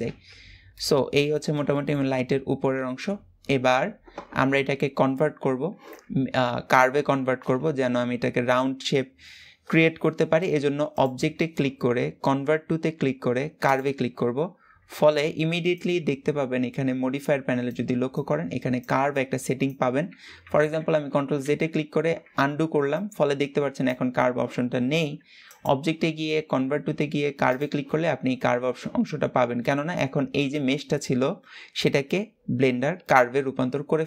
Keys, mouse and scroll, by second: 0.5 middle click, 1.1 scroll down 3, 1.4-1.9 shift+middle drag, 1.9-2.7 scroll up 1, 10.6-13.7 drag, 21.1 ctrl+z, 25.2-28.2 drag, 29.7-34.0 middle drag.